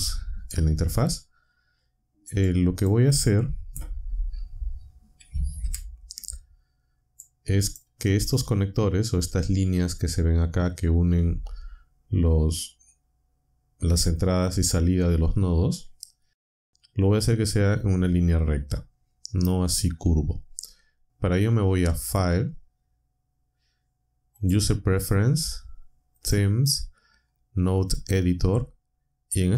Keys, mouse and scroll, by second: 2.4 click, 5.6 Up, 7.1 click, 22.0 click, 24.3 click, 26.2 click.